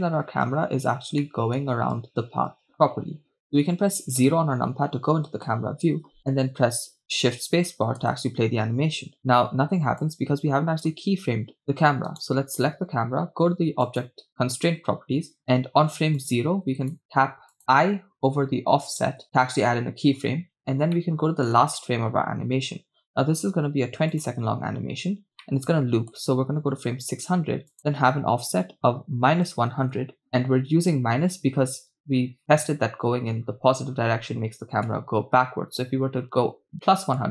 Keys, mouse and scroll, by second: 1.1 scroll down 2, 1.2-2.7 shift+middle drag, 4.1 KP_0, 7.0 shift+space, 8.0 shift+space, 10.6 click, 12.2 right click, 14.1 click, 16.2 click, 17.5-18.9 drag, 20.0 i, 20.5-20.9 scroll down 2, 21.0 middle click, 21.8-23.1 scroll down 3, 24.4 click, 25.5 middle click, 28.0-30.3 drag, 30.0 0, 34.9 KP_0, 35.5-36.7 scroll down 2, 36.8-37.3 scroll down 2.